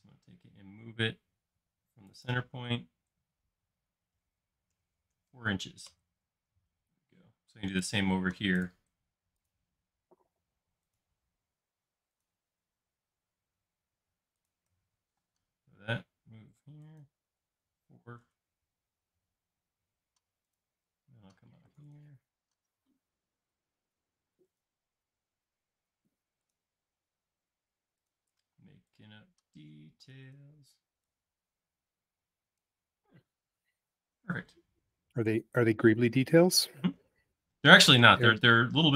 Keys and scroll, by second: 4.8 4, 5.1 shift+', 5.9 Return, 7.2 space, 15.1 m, 18.3 4, 18.5 Return, 19.6 space, 22.3-23.1 typing, 24.3-25.2 typing, 28.5 p, 30.1 Escape, 33.1 space.